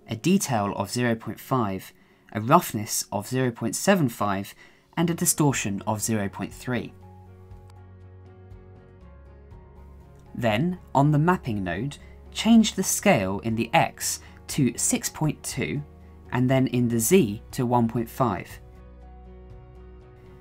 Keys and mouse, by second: 1.4-4.4 drag, 6.0-10.8 drag, 16.2 click, 18.3-20.4 drag.